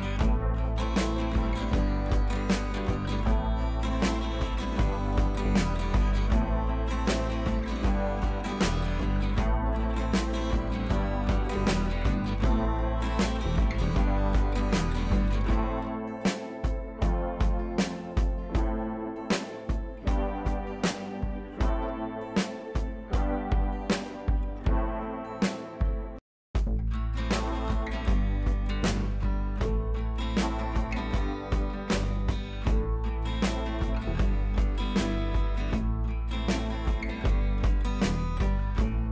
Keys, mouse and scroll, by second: 3.3 click, 3.9 shift+click, 4.5 ctrl+t, 5.9 shift+click, 6.5 ctrl+t, 7.1 click, 7.8-10.5 alt+drag, 10.5 Down, 11.9 ctrl+z, 12.8 ctrl+t, 13.3 click, 14.0-16.3 alt+drag, 16.3 Down, 17.7-23.2 drag, 18.5 click, 19.6-21.9 drag, 23.8 click, 24.8 ctrl+t, 25.3 click, 26.4-30.5 alt+drag, 30.5 scroll up 1, 30.8 scroll down 1, 31.1 click, 32.3 scroll down 1, 33.9 ctrl+t, 34.2 click, 35.0-37.9 alt+drag, 38.0 click, 38.9 ctrl+t, 38.9 ctrl+right click.